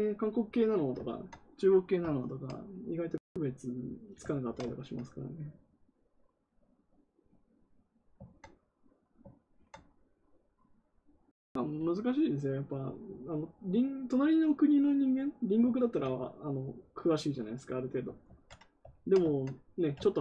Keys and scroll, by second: 18.2 ctrl+z.